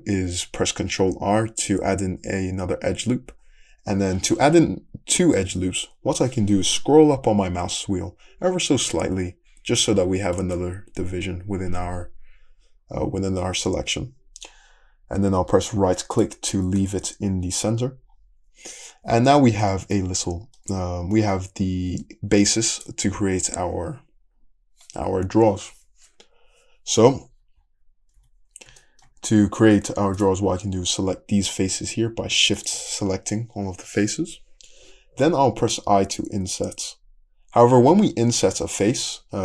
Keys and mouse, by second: 1.0 ctrl+r, 18.9-22.7 middle drag, 20.7 Tab, 21.9 Tab, 22.4 3, 22.7 click, 22.9-32.6 middle drag, 28.2 `, 32.6 shift+click, 32.7-39.4 shift+middle drag.